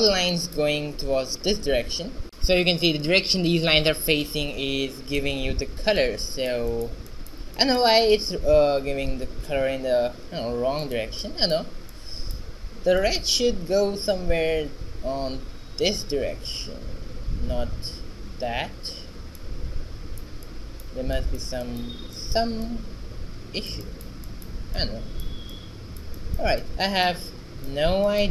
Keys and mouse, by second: 5.3 alt+r, 6.8 ctrl+a, 8.1 ctrl+a, 18.0-19.8 middle drag, 26.7-28.3 right drag.